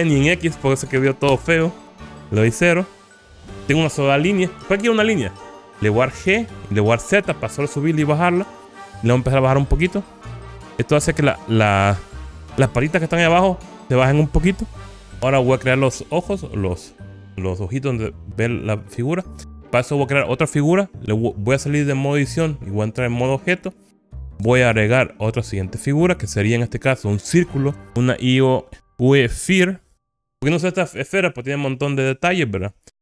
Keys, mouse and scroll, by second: 2.5 0, 3.4 Return, 6.3 g, 7.2 z, 15.5 click, 20.0 click, 22.5 click, 23.7 click, 24.8 shift+a.